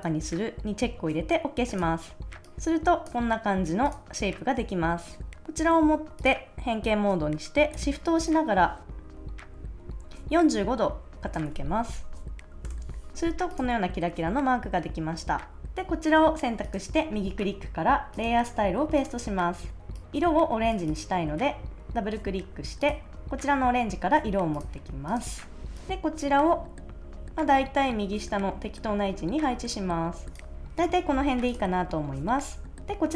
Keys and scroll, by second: 12.6 Return.